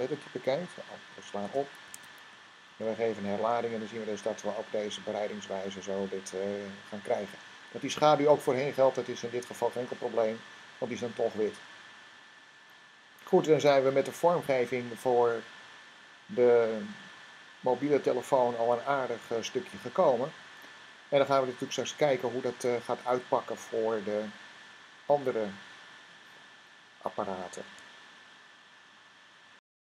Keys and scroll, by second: 1.2 s, 1.7 super+Tab, 2.5 r.